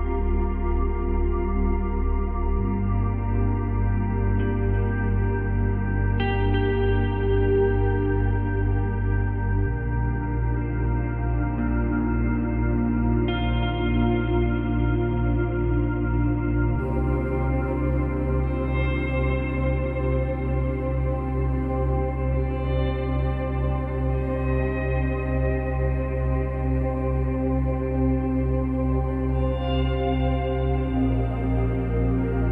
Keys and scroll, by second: 3.3 space, 6.3 space, 15.4 space, 16.6 space, 22.2 space, 23.7 space.